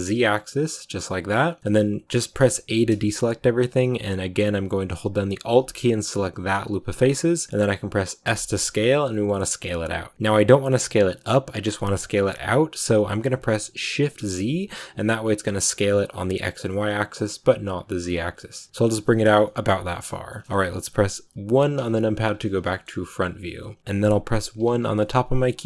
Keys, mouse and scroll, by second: 1.6-2.6 scroll up 2, 2.6 a, 6.8 scroll down 2, 7.2-19.2 middle drag, 19.2 scroll down 2, 19.3-22.1 middle drag, 22.1 click, 22.5 shift+middle click, 22.8-23.8 scroll up 1, 23.8 1.